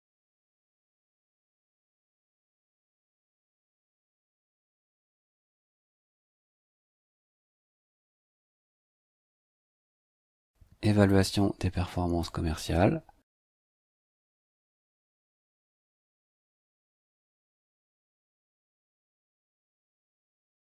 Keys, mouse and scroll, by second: 0.9 KP_4, 1.3 KP_Subtract, 1.6 space, 3.0 click, 6.3 t, 7.9 click, 9.2 click, 11.1-12.4 drag, 12.8 ctrl+c, 14.0 ctrl+click, 14.2 ctrl+v, 15.3 click, 16.9-17.8 typing, 18.1 click, 18.9-20.0 typing.